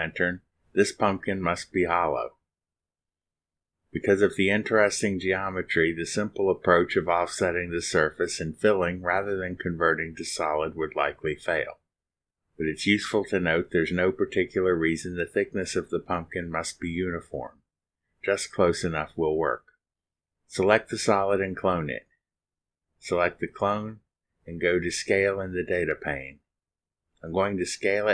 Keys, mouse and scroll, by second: 0.6 click, 20.6 click, 22.2 click, 23.3 scroll up 2, 23.9 scroll up 2, 24.9 click, 26.1 click, 27.0-28.1 typing, 27.6 Tab.